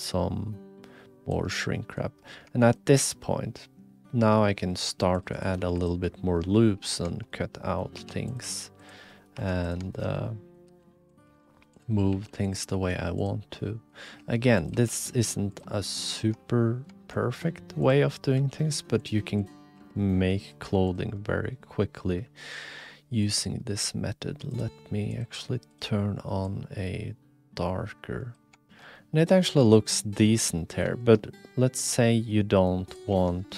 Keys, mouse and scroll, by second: 1.7 middle drag, 2.6 shift+click, 2.7 middle click, 2.9-4.4 middle drag, 4.8 ctrl+r, 5.6 3, 5.8 click, 6.4 x, 7.2 click, 7.4 click, 8.0 2, 8.2 click, 8.4 g, 9.1 click, 9.3 2, 9.6 click, 10.1 click, 10.7 r, 11.1 click, 11.2 g, 12.1 r, 12.4 click, 12.6 e, 13.5 middle click, 14.1 1, 14.6 click, 14.7 g, 15.9 middle click, 16.5 middle click, 17.1 middle click, 17.3 middle click, 17.3 click, 17.8 click, 18.1 click, 18.3 g, 19.8 g, 21.1-22.4 drag, 22.4 shift+middle click, 22.9 click, 23.2 middle click, 25.1 click, 28.6 shift+middle drag, 28.9-29.7 middle drag, 30.5 middle drag, 31.0 shift+middle drag, 31.9 h, 32.3 middle click.